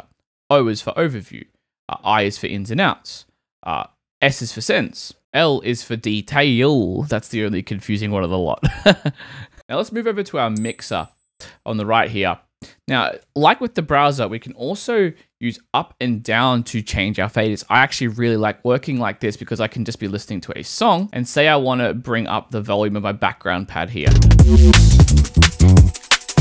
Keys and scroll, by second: 15.5 Down, 21.0 space.